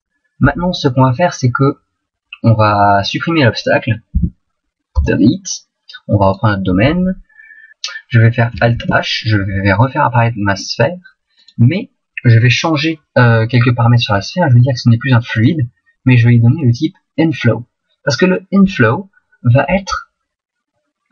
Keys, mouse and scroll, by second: 4.1 Delete, 6.3 right click, 8.7 alt+h, 10.1 middle click, 11.3 right click, 12.9 middle click.